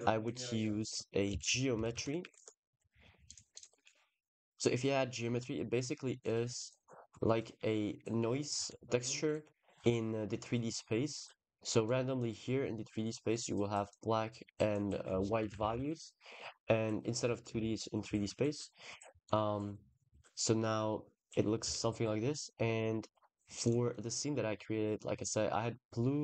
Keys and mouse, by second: 3.4 click, 3.6 ctrl+s, 4.4 click, 6.0 click, 6.5 click, 7.2 click, 11.1 click, 15.3 ctrl+z, 15.4 ctrl+z, 15.6 ctrl+z, 16.7 click, 17.4 ctrl+s, 17.9 KP_0, 19.1 click, 20.0 click, 20.7 click, 21.5 ctrl+s, 23.5 click, 23.8 click.